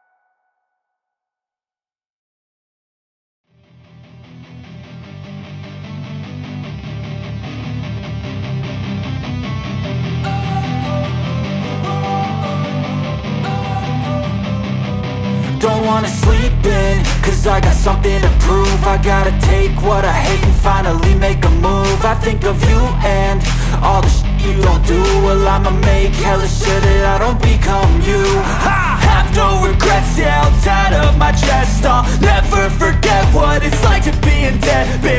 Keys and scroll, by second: 1.0 Return, 1.1-8.7 typing, 6.7 Down, 6.9 Return, 8.8 Up, 9.5 Return, 9.8 ctrl+s, 11.0 Return, 11.0-14.7 typing, 13.0 Return, 15.8 Return, 16.3 shift+9, 16.5 ctrl+s, 22.2 BackSpace, 22.7 ctrl+s, 26.0 Up, 26.7 Down, 26.9 Return, 27.1 Up, 28.0 Return, 28.3-29.8 typing, 30.1 ctrl+s, 31.8 Return, 32.4-33.3 typing, 33.4 Down, 33.6 Return, 34.9 BackSpace.